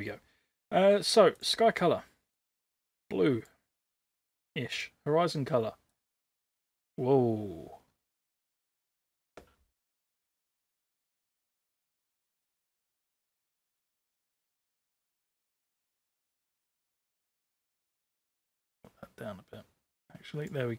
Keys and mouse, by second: 1.3 click, 4.7 click, 12.2 ctrl+z, 15.7 click.